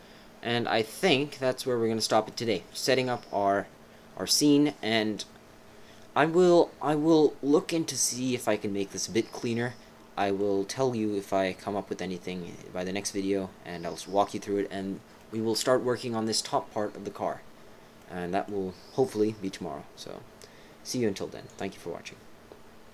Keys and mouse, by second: 2.3 click, 4.3 right click, 7.0-9.2 right drag, 9.2-10.4 middle drag, 15.2 middle click, 15.7 right click, 16.2 middle click, 16.3 right click, 18.0 right click.